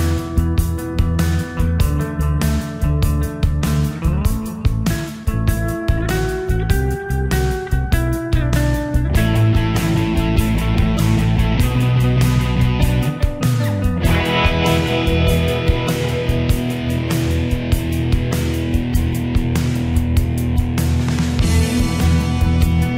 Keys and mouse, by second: 0.0-2.0 typing, 2.4 Return, 13.8 click.